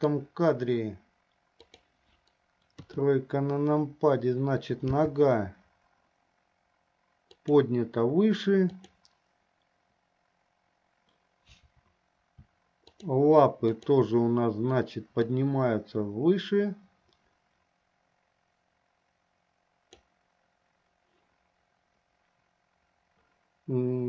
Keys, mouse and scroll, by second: 3.0 KP_3, 5.1 g, 9.0 click, 12.9 shift+click, 14.0 shift+click, 15.7-20.3 drag.